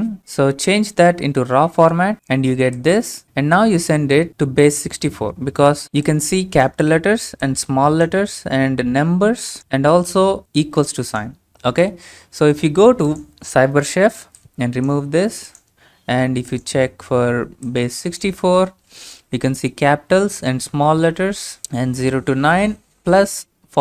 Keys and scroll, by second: 1.7-2.6 typing, 3.2 Up.